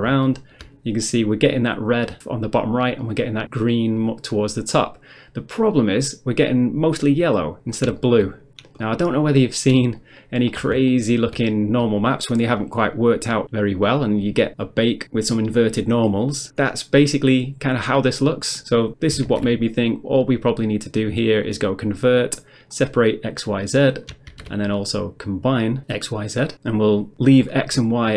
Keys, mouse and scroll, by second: 0.0 middle click, 0.2 shift+middle click, 3.0 middle click, 3.4 middle click, 3.7 middle click, 5.6 middle click, 5.9 scroll up 1, 6.5 middle click, 7.6 middle click, 7.7 scroll down 1, 8.0 shift+middle click, 8.8 shift+middle click, 9.6 shift+middle click, 10.0 shift+middle click, 12.8 middle click, 13.3 middle click, 18.9 shift+a, 21.5 click, 22.7 click, 23.0 click, 23.4 click, 24.7 shift+a, 26.5 click, 27.0 click, 27.4 click.